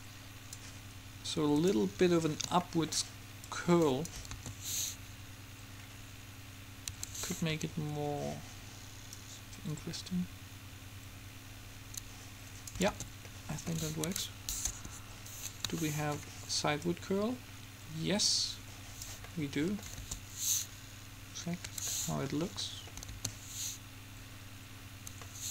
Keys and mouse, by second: 3.4 middle click, 3.6 click, 4.1 middle click, 4.6 alt+a, 7.1 Escape, 9.3-11.2 drag, 13.1 alt+a, 14.2 Escape, 14.9 KP_7, 18.2 click, 18.4 click, 19.4 middle click, 20.1 alt+a, 21.8 Escape, 23.2 alt+a, 25.1 Escape.